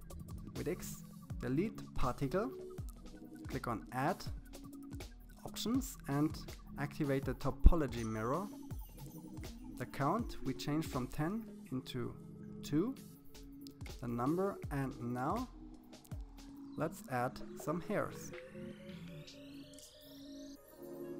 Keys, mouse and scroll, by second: 2.0-3.6 drag, 4.3-5.9 drag, 9.0-10.5 drag, 20.7 click.